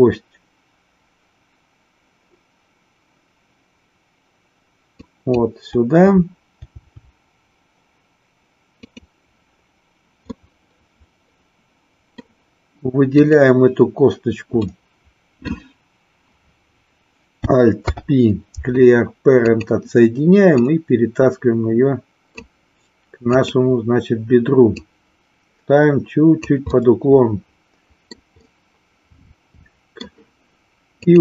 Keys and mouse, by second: 5.0 click, 6.7 g, 8.7 click, 10.5-12.3 middle drag, 13.2 click, 14.6 middle click, 17.7 alt+p, 20.4-22.3 drag, 23.3 click, 24.8-26.5 drag, 26.7-28.2 middle drag, 28.5-30.0 middle drag, 31.0 click.